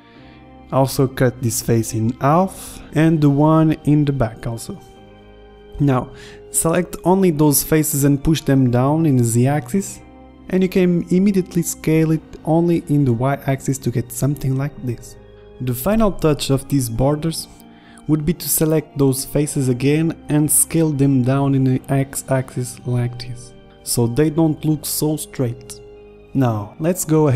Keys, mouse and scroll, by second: 1.3 ctrl+r, 4.1 ctrl+r, 5.1 ctrl+Tab, 9.9 e, 16.1 click, 16.8 s, 18.4-19.5 middle drag, 20.5 middle click, 21.7-23.2 middle drag, 23.2 KP_5, 23.7 middle click, 24.5 middle click, 25.3 Tab, 26.2 KP_1, 26.4 Tab.